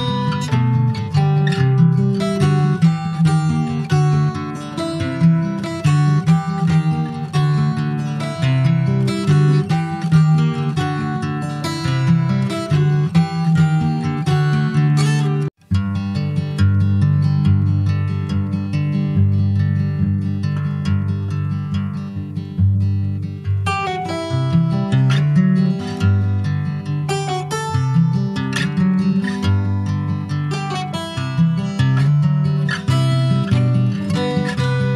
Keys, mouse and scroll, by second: 0.0-1.2 middle drag, 1.2-5.6 drag, 6.9-9.2 drag, 9.4 middle click, 10.0 ctrl+s, 10.1 click, 10.6 /, 11.2 click, 11.5-12.8 middle drag, 12.8 ctrl+s, 12.9 click, 13.2 scroll up 1, 13.4 shift+middle click, 13.8-15.0 shift+scroll up 1, 15.0 s, 16.6 s, 22.7-24.9 drag, 25.2-25.8 scroll down 4, 25.4 click, 25.8 middle click, 26.0-26.3 scroll up 1, 26.3 ctrl+s, 26.5-27.8 middle drag, 27.8 ctrl+s, 28.0 shift+middle click, 28.2 shift+scroll up 1, 28.4 middle click, 29.3 scroll up 1, 29.5-31.6 shift+middle drag, 31.6 ctrl+s, 31.8 middle click, 32.3 ctrl+s, 34.6 middle click.